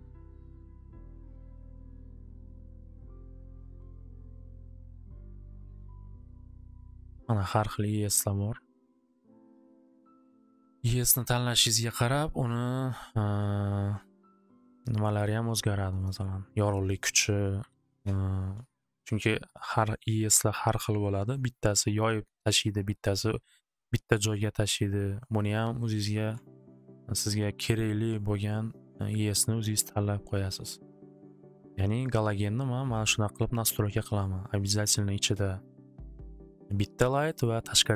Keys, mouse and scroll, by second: 0.9 click, 2.5 click, 2.6 click, 4.5 click, 4.6 click, 7.4 click, 7.6 click, 11.4 click, 13.1-14.8 drag, 15.3 middle click, 17.1 click, 17.3-18.2 typing, 17.3 click, 19.8 typing, 25.0 click, 25.4 click, 25.7 click, 25.9-28.1 typing, 32.0 click, 32.6 middle click, 34.0 middle click, 34.8 middle click, 37.4 middle click.